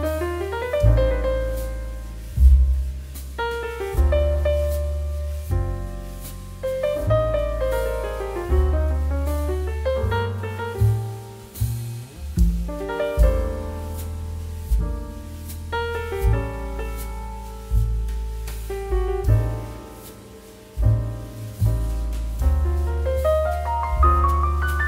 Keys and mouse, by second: 5.1 click, 5.5 middle click, 5.8 click, 8.9 z, 9.7 click, 15.1 shift+a, 18.1 click, 18.5 g, 18.9 click, 21.5 0, 21.8 Return, 22.5 middle click, 22.8 g, 23.4 click, 23.5 middle click, 23.9 shift+middle click.